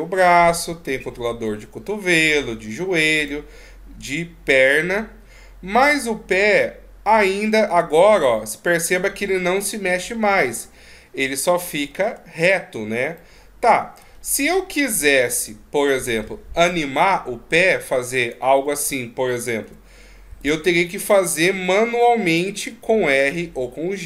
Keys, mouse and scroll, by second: 3.2 right click, 4.0 g, 11.5-11.9 scroll up 3, 11.9-13.2 scroll down 2, 13.2 middle click, 14.1-14.5 shift+scroll up 1, 14.5 shift+scroll down 1, 15.2-16.0 scroll up 5, 16.2 middle click, 16.7 middle click, 18.2 right click, 19.6 r, 21.3 right click, 21.5 r.